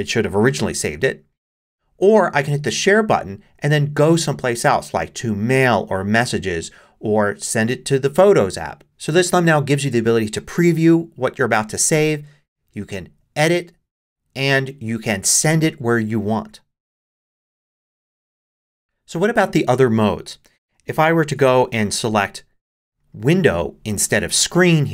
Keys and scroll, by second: 21.2 shift+super+5.